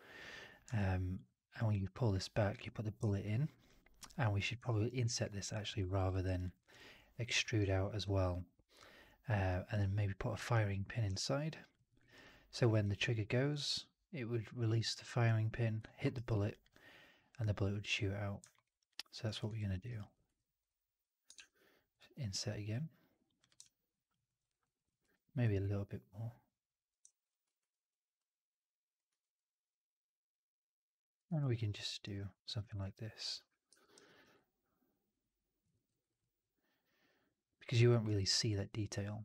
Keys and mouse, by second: 0.6-1.0 alt+drag, 2.2 click, 3.0-3.4 alt+drag, 3.5 alt+drag, 4.5 alt+right drag, 4.9 alt+click, 6.0 alt+middle drag, 6.1 alt+right click, 6.3 alt+click, 7.5-9.6 alt+drag, 11.1-11.6 alt+drag, 11.7 alt+middle drag, 11.9 alt+right drag, 12.1-12.4 alt+drag, 12.6 alt+middle drag, 15.7 alt+middle click, 16.0 alt+right drag, 16.4 alt+click, 18.4 alt+middle click, 18.6 alt+right click, 18.8 alt+click, 19.1 alt+right click, 19.3 alt+click, 19.6 alt+middle click, 19.7 alt+right click, 19.9 alt+click, 20.2 3, 20.5 click, 21.2 shift+Tab, 23.5 alt+click, 24.1 alt+middle click, 24.3 alt+right click, 24.5 alt+click, 24.9 r, 26.3 middle click, 27.0 click, 27.5 ctrl+e, 29.0 r, 30.5 middle click, 31.2 w, 31.6 alt+middle click, 31.8 alt+right click, 32.1 alt+click, 33.6 4, 33.9 alt+right drag, 34.1 alt+right drag, 34.2-35.7 drag, 35.6 middle click, 35.8 right drag, 36.0 right drag, 36.1-37.6 drag, 37.8 alt+middle drag, 37.9 alt+right drag, 38.2-39.2 alt+drag.